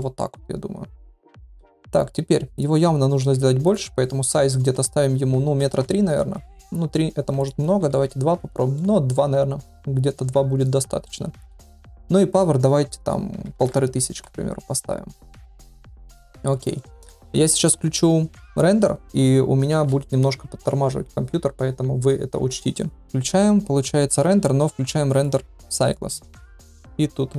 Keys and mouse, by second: 2.5 click, 3.6-6.3 drag, 6.4-6.9 middle drag, 7.4-8.5 drag, 8.7-11.0 middle drag, 12.4-14.8 drag, 13.8 KP_0, 15.6 ctrl+s, 15.9 middle click, 16.7 shift+middle click, 25.2-26.0 drag, 26.7-27.3 drag.